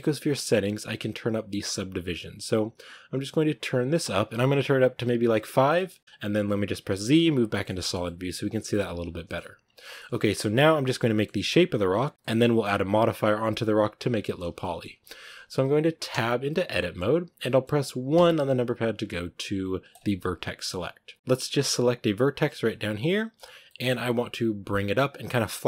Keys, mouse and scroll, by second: 3.3-5.6 drag, 5.6-7.1 shift+middle drag, 7.1 z, 7.5-8.9 shift+middle drag, 8.9 scroll up 1, 9.1-9.6 shift+middle drag, 9.6 scroll down 1, 9.8-16.0 shift+middle drag, 16.0 Tab, 16.4-18.0 middle drag, 18.0 1, 19.8 click, 20.4 middle click, 20.6-21.1 scroll up 1, 21.1 middle click, 21.7 right click, 22.5-25.6 middle drag.